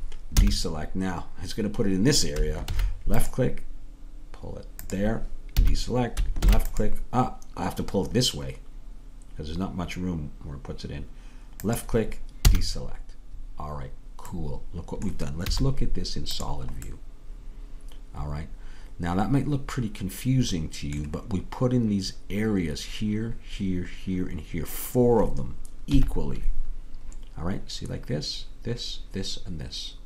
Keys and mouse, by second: 0.4 a, 2.7 ctrl+r, 5.6 a, 6.4 ctrl+r, 12.5 a, 14.4 middle click, 25.9 KP_3.